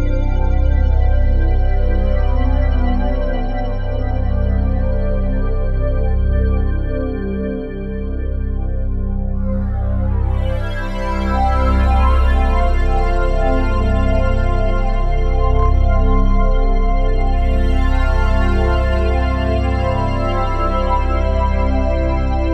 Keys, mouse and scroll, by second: 0.2-0.5 typing, 0.9 click, 1.5-3.4 drag, 4.1 typing, 4.6 click, 7.6 typing, 9.7 click, 9.7 typing, 10.8-11.7 typing, 15.4-16.1 typing, 17.3-21.5 drag, 21.5 ctrl+s.